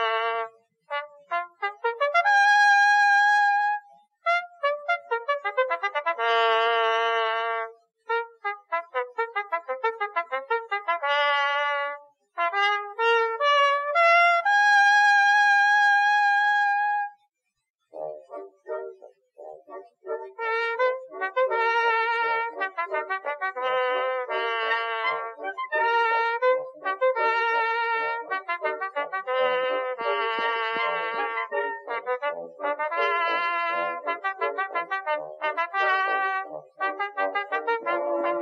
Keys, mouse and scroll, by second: 0.6 shift+d, 2.5 Tab, 3.0 x, 4.1 Tab, 4.4 right click, 5.4 g, 6.8 Tab, 7.9-8.9 middle drag, 8.9 KP_1, 9.5 ctrl+r, 11.3 z, 11.5 a, 11.8 c, 12.4 click, 12.8 x, 13.7 click, 15.5 Tab, 16.6 0, 18.0-20.6 drag, 20.6 Tab, 21.0 z, 22.5 click, 24.0-25.8 drag, 25.7 g, 28.3 middle click, 30.0 click, 30.6 middle click, 32.4 middle click, 33.5 ctrl+r, 35.7 ctrl+r, 37.1 ctrl+r, 38.2 click.